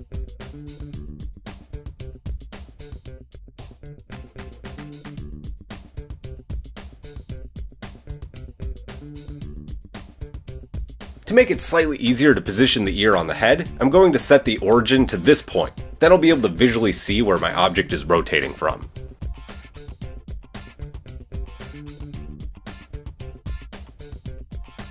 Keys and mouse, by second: 0.6-10.6 middle drag, 1.3 Tab, 9.2 Tab, 10.6 click, 10.7-14.6 middle drag, 11.4 a, 12.2 KP_3, 14.6 click, 14.7 middle click, 14.9-16.6 drag, 16.4-17.4 typing, 16.6-19.6 middle drag, 18.9 Tab, 19.6-23.5 drag, 23.5-24.9 middle drag.